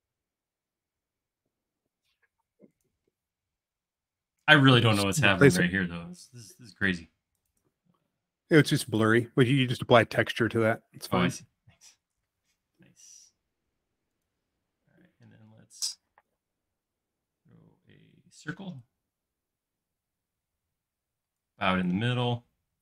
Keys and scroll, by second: 3.1 l, 14.7 space, 16.7 x, 18.0-18.9 typing.